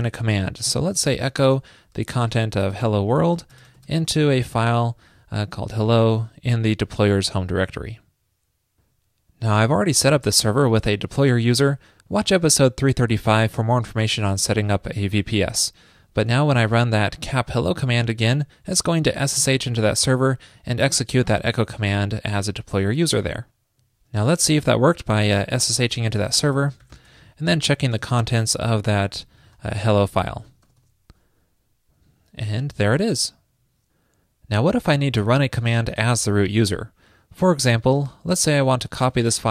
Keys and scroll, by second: 7.3 super+Right, 7.8 super+s.